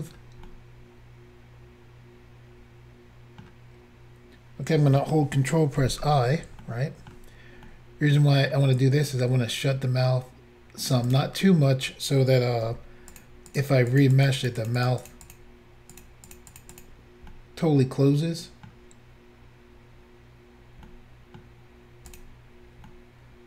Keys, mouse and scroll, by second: 0.5 click, 0.5 middle click, 0.5 scroll down 2, 5.8 ctrl+i, 6.7 shift+middle click, 7.7 middle click, 11.1 click, 11.2 click, 13.1 click, 13.1 f, 13.2 click, 13.5 click, 13.6 click, 13.9 click, 14.0 double click, 14.2 click, 14.3 click, 14.4 click, 14.5 double click, 14.6 click, 14.7 double click, 14.8 double click, 14.9 double click, 15.0 double click, 15.1 double click, 15.3 double click, 15.4 double click, 16.0 double click, 16.2 double click, 16.3 double click, 16.5 double click, 16.6 double click, 16.8 double click, 16.8 double click, 17.3 middle click, 20.9 middle click, 22.2 click, 22.2 click.